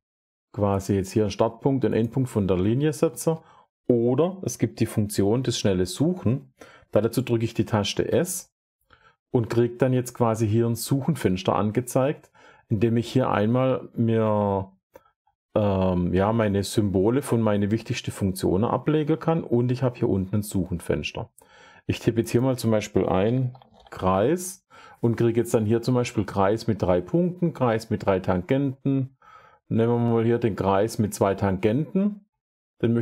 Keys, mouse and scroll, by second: 0.7 click, 1.2 scroll, 1.9 click, 3.0 Escape, 7.8 s, 22.3 click, 22.9-24.3 typing.